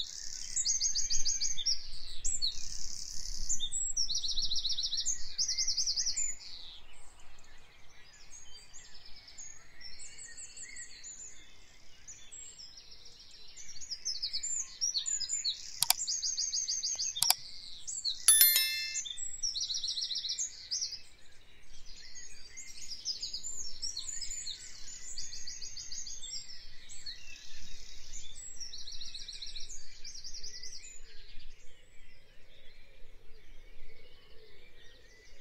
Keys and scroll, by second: 5.8 F5, 23.8 F5.